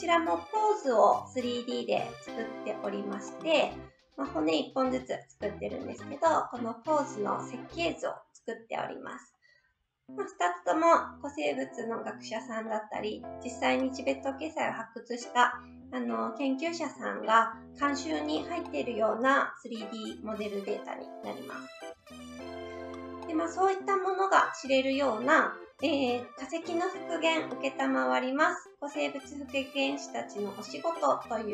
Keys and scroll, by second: 21.9 Right.